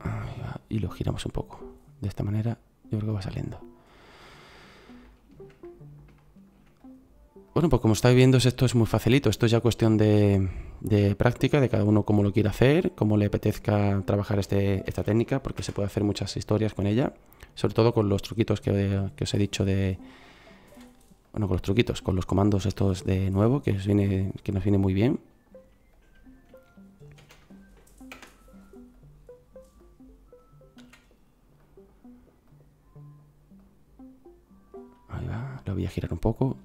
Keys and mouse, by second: 3.6-4.5 middle drag, 6.5-7.5 drag, 7.5-8.7 right drag, 8.7-14.0 drag, 14.8 shift+d, 16.2 click, 20.7 s, 25.9-27.2 middle drag, 27.2 shift+d, 30.8 s.